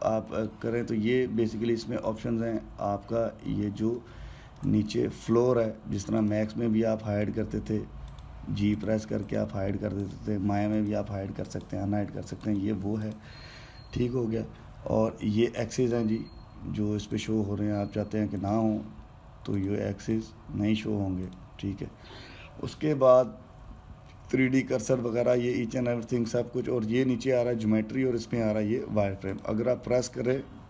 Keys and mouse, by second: 3.6-6.9 middle drag, 6.9-9.9 drag.